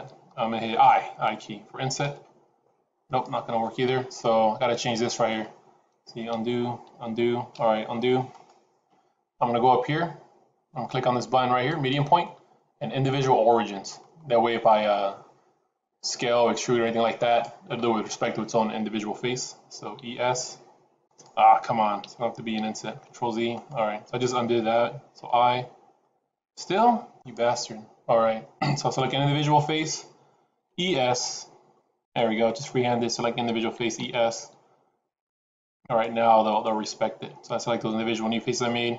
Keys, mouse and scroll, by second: 6.2 ctrl+z, 6.8 ctrl+z, 8.2 shift+click, 11.6 click, 19.6 e, 21.9 ctrl+z, 22.5 ctrl+z, 23.5 shift+click, 25.1 i, 28.7 click, 30.5 e, 32.3 click, 33.7 e, 36.4 shift+click.